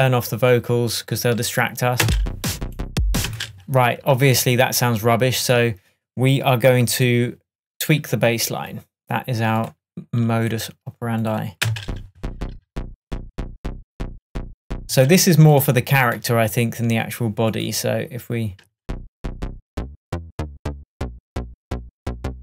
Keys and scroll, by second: 2.1 space, 3.3 space, 6.9 super+s, 11.7 space, 14.9 space, 18.7 space.